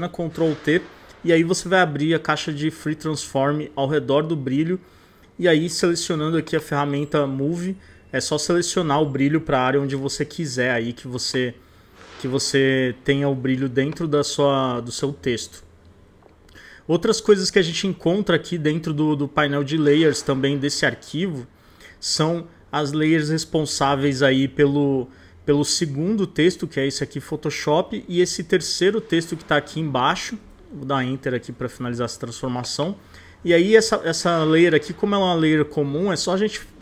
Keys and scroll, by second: 0.1 super+t, 9.5 super+t, 30.4 Return.